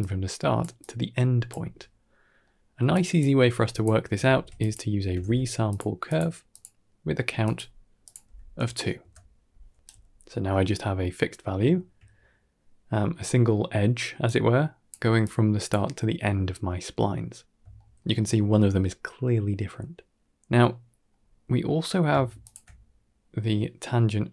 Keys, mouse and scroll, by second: 0.5 d, 0.5 d, 0.6 click, 0.6 d, 1.4 d, 2.3 middle click, 2.8 click, 3.2 g, 4.1 shift+a, 6.4 click, 7.9 click, 9.8 d, 9.9 right click, 10.4 d, 10.8-11.1 middle drag, 12.1 shift+middle drag, 14.1 click, 15.1 click, 17.4 scroll down 1, 17.6 shift+middle drag, 20.6-21.0 middle drag, 21.0 scroll down 2, 21.2 middle drag, 21.7 scroll down 2, 22.3 ctrl+shift+click.